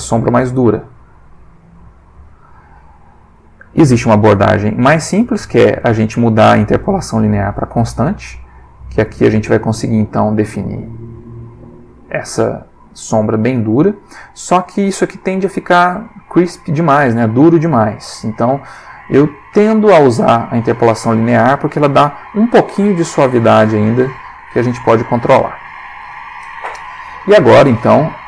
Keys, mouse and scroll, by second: 0.3 click, 1.6-4.4 drag, 4.8-5.4 drag, 5.8 click, 7.7 click, 8.8-9.9 drag, 10.6-11.4 drag, 11.5-12.2 drag, 13.4 click, 14.0-14.7 drag, 18.4 click, 20.2 click, 22.7-23.6 drag, 24.5 click, 27.5 click.